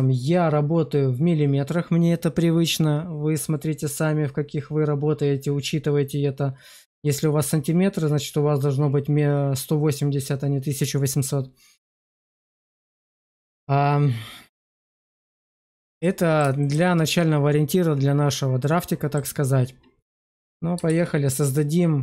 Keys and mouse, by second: 13.2 click, 14.4 middle click, 15.2 shift+middle drag, 15.9 middle click, 16.5 shift+middle click, 18.5 middle click, 20.8 shift+a.